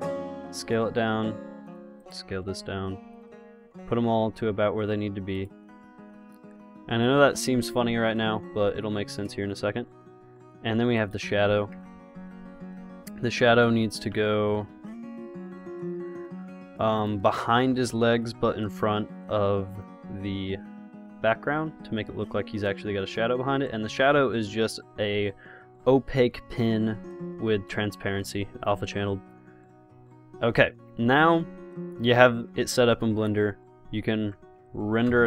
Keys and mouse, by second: 0.4 s, 2.7 s, 3.6 g, 6.1 g, 12.0 KP_0, 13.1 g, 17.8 click, 19.1-20.8 drag, 20.8 KP_0, 30.3-33.6 drag, 33.6 KP_0, 34.4 KP_0.